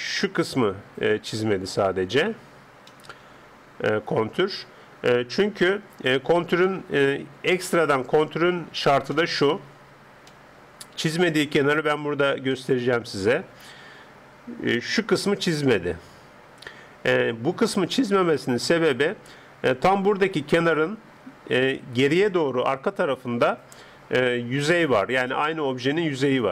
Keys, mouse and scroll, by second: 2.1-5.2 middle drag, 6.6-8.6 middle drag, 9.2-14.2 middle drag, 14.1-14.8 d, 14.8 click, 18.6 d, 22.0 d.